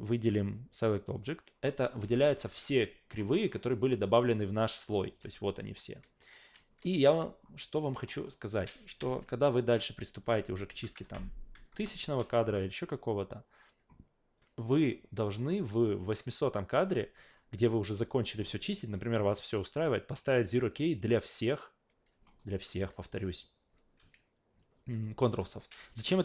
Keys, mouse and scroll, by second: 1.1 click, 1.6 alt+middle drag, 2.0 f, 2.7 alt+right click, 3.3 alt+middle click, 3.7 alt+right click, 4.8 click, 5.1 a, 6.1-6.7 alt+middle drag, 7.0 alt+right click, 7.2 alt+middle drag, 7.6 alt+drag, 8.0 alt+middle drag, 10.1 click, 20.7 click, 22.2 alt+middle drag, 25.9 ctrl+z.